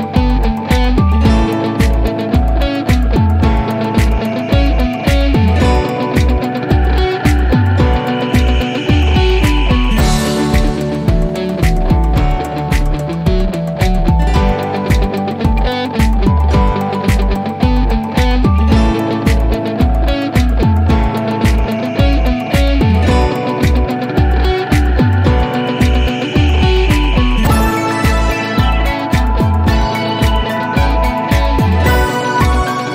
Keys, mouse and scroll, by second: 0.5 click, 3.9 click, 6.8 click, 7.3-7.7 scroll down 1, 10.0 click, 14.3 scroll down 1, 15.3-22.8 drag.